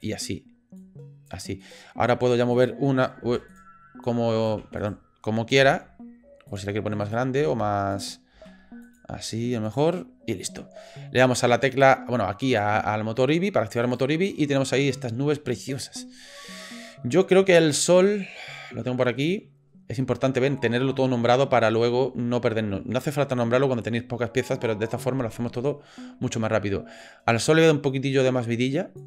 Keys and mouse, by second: 0.9 click, 1.6 click, 2.1 click, 2.5 click, 3.2 ctrl+z, 3.5 click, 4.0 click, 4.6 ctrl+z, 4.8 click, 5.6 g, 7.0 click, 7.4 g, 8.3 s, 9.3 s, 12.5 click, 13.9 click, 19.2 click, 27.4-29.0 drag.